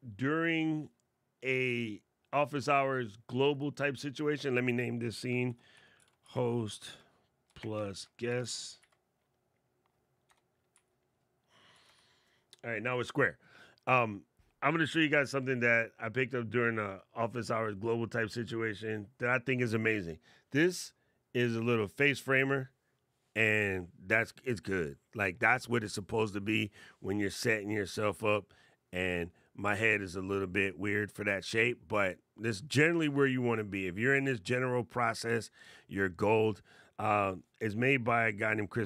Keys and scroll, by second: 5.2 shift+h, 7.2 shift+=, 7.6 shift+g.